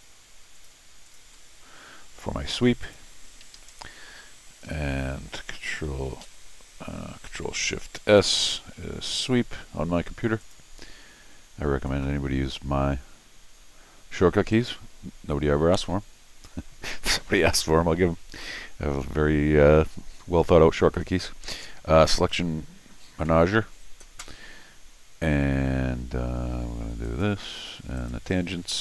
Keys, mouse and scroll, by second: 0.5 click, 1.0 ctrl+click, 2.8 click, 3.4 Escape, 3.5 Escape, 3.7 scroll down 2, 4.7 scroll down 2, 8.0 ctrl+shift+s, 10.4 click, 14.5 right click, 22.2 click, 27.0 click, 28.0 click.